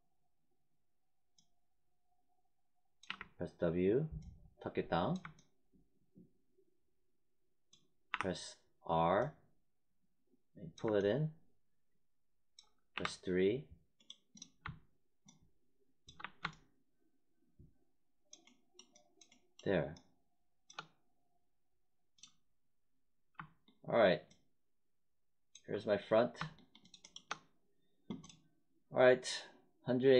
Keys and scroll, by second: 3.0 w, 8.0 r, 12.9 3, 16.1 1.